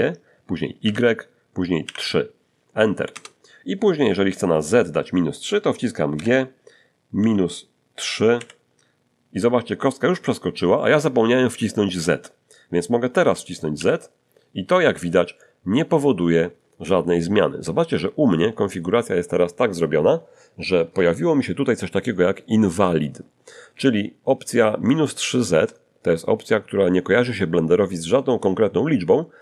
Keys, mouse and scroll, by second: 0.8 y, 1.8 3, 3.1 Return, 6.1 g, 7.2 -, 8.3 3, 13.7 z.